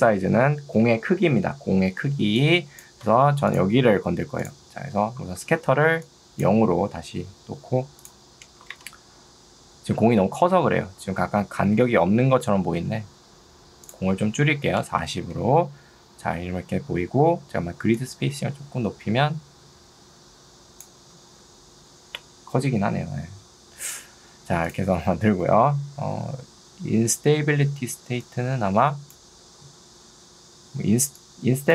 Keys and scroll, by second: 0.8 Escape, 2.2 ctrl+2, 3.2 Escape, 5.6 ctrl+2, 6.8 Escape, 8.8 Return, 12.2 ctrl+2, 12.8 Escape, 15.2 Return, 21.4 ctrl+z, 29.6 ctrl+z, 31.0 ctrl+2.